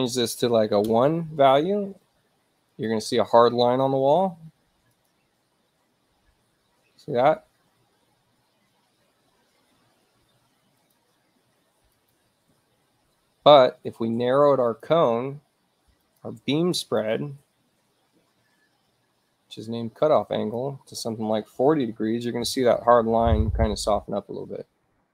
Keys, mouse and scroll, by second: 2.7 click, 5.0 click, 10.8 click, 12.0 click, 14.7 click, 15.2-15.8 scroll down 1, 16.1 shift+click, 16.8 click, 20.3 click, 21.4-22.3 typing, 22.5 Return, 24.8 click.